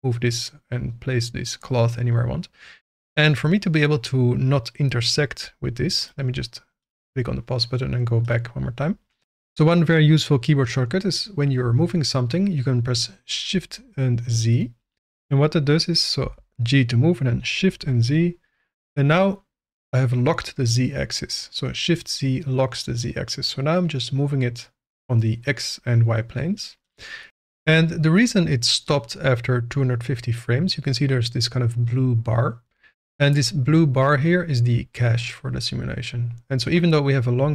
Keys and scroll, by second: 16.2 g, 17.7 shift+z.